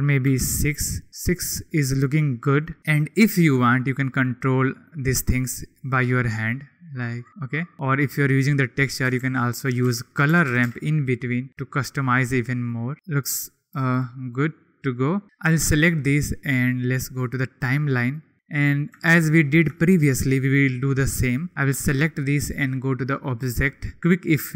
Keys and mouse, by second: 4.0-4.9 drag, 6.3 click, 9.2 shift+a, 11.5 click, 12.6 drag, 13.9-15.0 drag, 16.7-18.3 drag, 19.6-20.3 shift+middle drag, 23.2-24.5 drag.